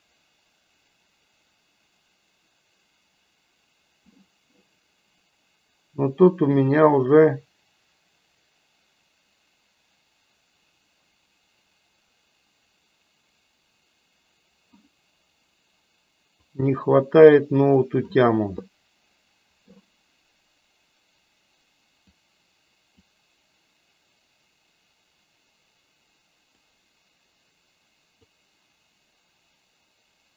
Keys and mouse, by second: 16.6-17.8 drag, 22.1-23.2 drag, 26.7-28.5 drag.